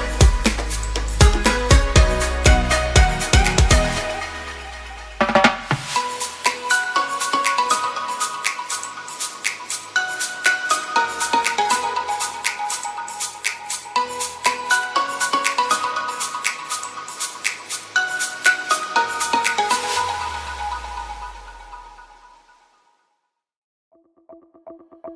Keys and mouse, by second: 0.0 alt+click, 0.3 ctrl+e, 1.4 a, 2.0 middle click, 3.6 click, 3.8 alt+click, 4.2 ctrl+e, 5.5 a, 6.5 middle click, 7.8 click, 8.5 alt+click, 8.8 ctrl+e, 9.7 a, 10.0 middle click, 10.7 click, 11.2 alt+click, 11.8 ctrl+e, 12.4 a, 13.5 alt+click, 14.1 ctrl+e, 14.6 a, 15.0 a, 15.2 u, 15.6 a, 16.0 shift+middle click, 17.1 middle click, 18.6 click, 18.8 alt+click, 19.1 ctrl+e, 19.7 a, 20.2 a, 20.4 u, 20.7 a, 21.2 shift+middle click, 22.4 Tab, 23.1 KP_Divide, 24.5 h.